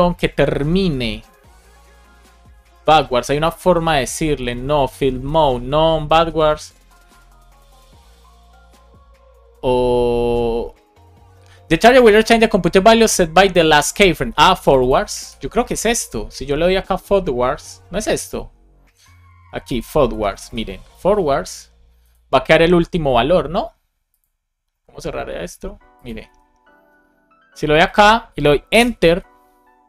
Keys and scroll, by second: 15.1 super+c, 20.0 space, 20.3 super+v, 20.3 super+c, 20.8 super+s, 26.2 super+r, 28.7 Return.